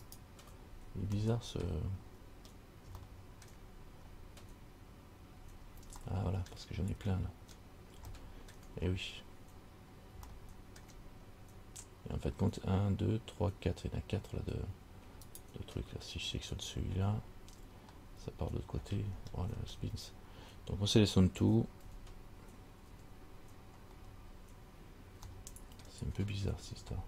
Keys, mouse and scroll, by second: 0.3 alt+right click, 1.5 shift+middle click, 2.2-2.6 scroll up 5, 3.2 shift+middle click, 4.2-4.9 scroll up 2, 5.5-5.8 scroll up 2, 6.2 shift+middle click, 7.1-8.2 scroll up 3, 8.3 shift+middle click, 9.6 scroll up 2, 10.6 shift+middle click, 11.5-11.9 scroll up 2, 15.5 alt+right click, 16.5-18.1 scroll down 8, 18.1-18.8 scroll down 2, 19.0-19.9 scroll up 12, 21.7 l, 22.1 l, 23.1 l, 24.1-25.4 scroll down 4, 25.5 shift+middle click, 26.7-27.0 scroll down 5.